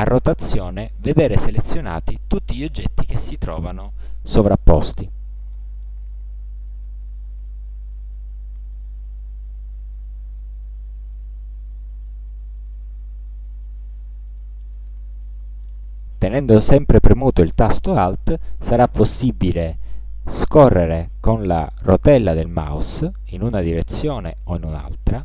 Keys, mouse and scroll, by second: 0.6 alt+click, 1.5 alt+click, 2.4 alt+click, 3.1 alt+click, 5.0 alt+click, 6.2-7.5 drag, 7.9 alt+click, 8.7 alt+click, 9.5 alt+click, 9.6 alt+middle click, 10.3 alt+middle click, 11.2 alt+middle click, 12.0 alt+click, 12.9 alt+click, 13.8 alt+middle click, 14.7 alt+middle click, 14.8 alt+click, 15.3 middle click, 20.6 alt+scroll up 2, 21.3 alt+scroll up 2, 22.0 alt+scroll up 2, 22.6 alt+scroll up 1, 23.2 alt+scroll up 2, 23.9-25.2 alt+scroll down 10.